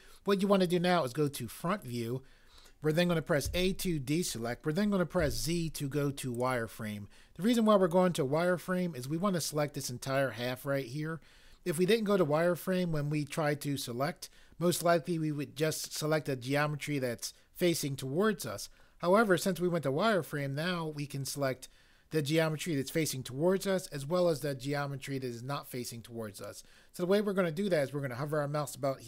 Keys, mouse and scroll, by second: 3.4 a, 5.2 z, 6.4 click.